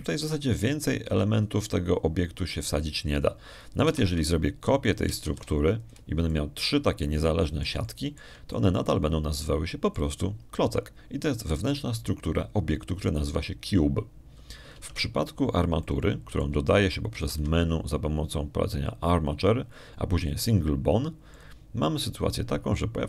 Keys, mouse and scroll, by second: 5.7 shift+d, 6.7 shift+click, 7.1 shift+d, 7.7 shift+click, 8.1 shift+middle click, 9.5 shift+middle click, 10.4-12.0 shift+middle drag, 16.6 Tab, 17.1 middle click, 17.7 click, 19.0 shift+a.